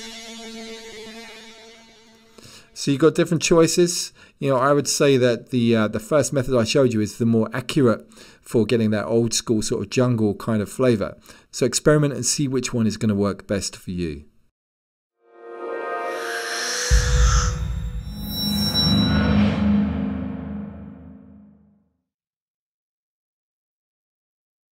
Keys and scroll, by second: 4.0 super+z.